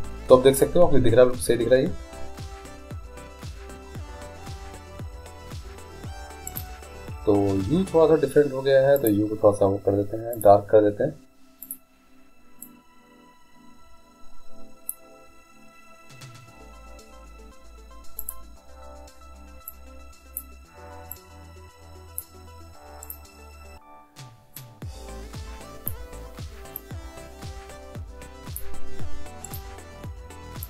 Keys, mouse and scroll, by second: 0.0 Escape, 6.6-8.6 right drag, 9.2-13.6 drag, 18.4-23.2 drag, 24.7-26.5 drag, 24.7 right click, 27.0-28.7 drag, 29.7-30.6 right drag.